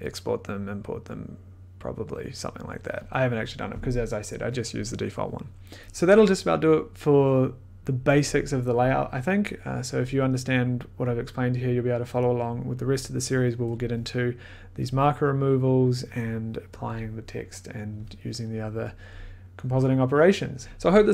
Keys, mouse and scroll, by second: 2.4-5.8 drag.